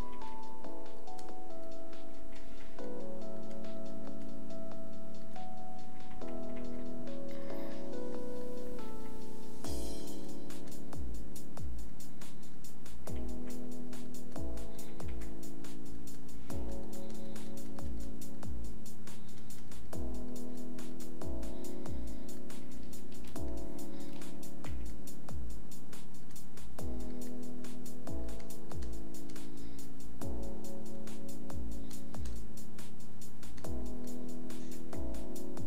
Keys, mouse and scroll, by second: 23.6 click.